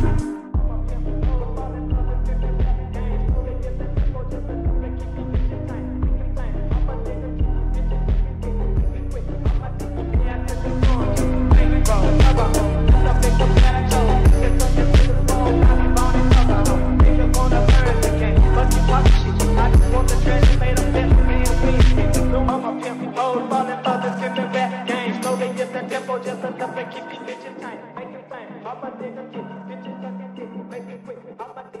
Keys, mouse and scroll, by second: 3.3 shift+middle click, 3.8 scroll up 2, 4.3 g, 5.3 Tab, 5.8-6.6 shift+middle drag, 6.6 scroll down 1, 6.8-7.5 right drag, 7.5-8.0 scroll up 5, 8.1-8.6 middle drag, 8.6-9.8 scroll down 12, 8.9 Tab, 9.8-11.3 scroll up 11, 11.3 shift+middle click, 11.8-12.4 scroll up 2, 12.5 e, 12.7 s, 13.8 click, 14.1 click, 14.3 scroll down 1, 14.4 s, 15.4 click, 16.2 e, 17.5 scroll up 1, 17.5 `, 18.0 scroll down 4, 18.1 g, 18.5 Tab, 18.8-19.3 middle drag, 19.3 Tab, 19.5-20.9 typing, 21.8-22.5 scroll up 5, 22.0 shift+middle click, 22.5-23.9 middle drag, 23.9 scroll down 2, 24.4 click, 25.1 click, 25.2 shift+click, 25.7 i, 27.1 s, 27.8 s, 28.2 z, 28.4 s, 29.5 middle click, 29.8 e, 30.5 Tab, 30.7 middle click, 31.0-31.4 right drag, 31.4 scroll up 5, 31.7 Tab.